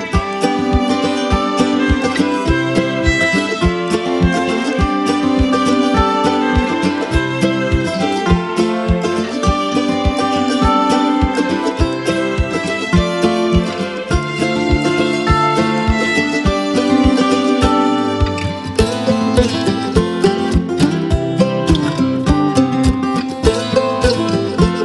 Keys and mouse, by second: 0.0-2.8 drag, 2.8 space, 2.9-3.5 click, 3.3 space, 3.6 click, 4.6 space, 4.8-5.4 drag, 11.2-14.3 typing, 11.6 click, 12.0 click, 12.6 click, 13.2-13.8 click, 13.9-14.5 click, 14.5-16.1 click, 15.3 space, 15.4 click, 15.8 space, 16.5 click, 18.2 space, 19.1 click, 19.3 space, 19.5 click, 19.9 space, 21.4 [, 22.0-23.6 drag, 23.5 space, 23.7 click, 24.0 space, 24.4-24.8 click.